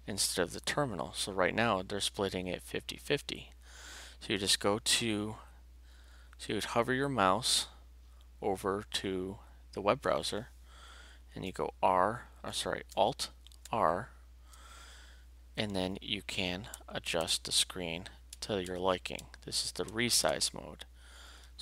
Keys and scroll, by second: 13.6 alt+r, 16.7 Right, 18.3 Left, 19.9 Right.